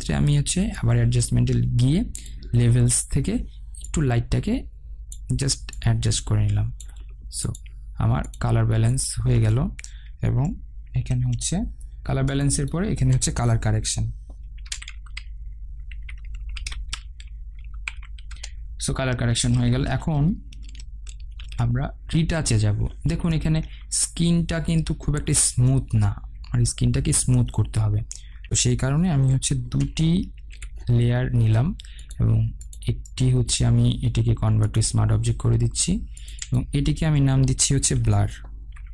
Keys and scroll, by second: 11.2 ctrl+g, 18.6 Return, 21.6 ctrl+alt+shift+e, 30.2 ctrl+j.